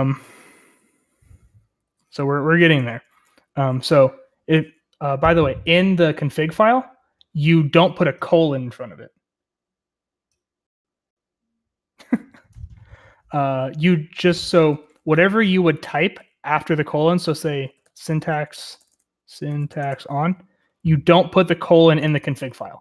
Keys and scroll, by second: 0.0-3.1 typing, 16.8-20.5 typing.